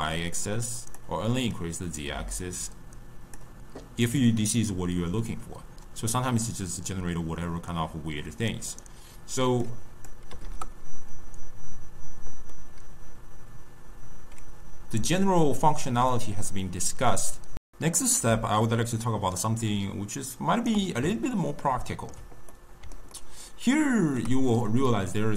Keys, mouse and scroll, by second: 4.2-7.2 middle drag, 9.6-12.5 drag, 12.5-17.5 middle drag, 18.2 d, 18.5-20.6 right drag, 20.6 d, 21.2-25.3 ctrl+middle drag.